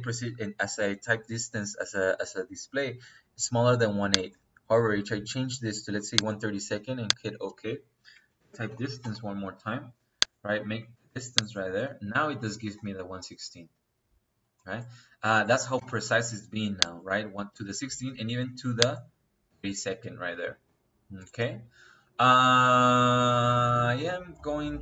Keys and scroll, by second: 8.2-8.9 typing, 15.6 space.